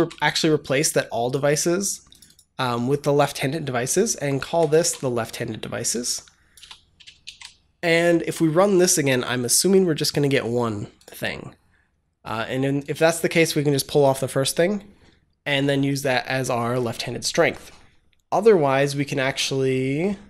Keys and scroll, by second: 4.3 ctrl+v, 4.6 ctrl+s, 6.5 BackSpace, 7.1 ctrl+s.